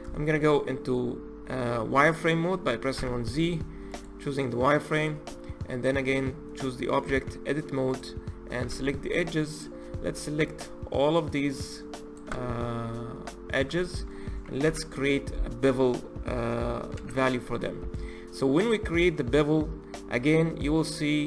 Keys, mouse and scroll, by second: 0.0-0.7 shift+middle drag, 0.7 click, 2.8 z, 4.8 click, 5.8 click, 6.9 Tab, 7.8 click, 8.5 2, 9.0 click, 9.3 click, 10.4 shift+click, 11.2 shift+click, 11.9 shift+click, 12.8-14.5 middle drag, 14.5 KP_1, 16.9 ctrl+b.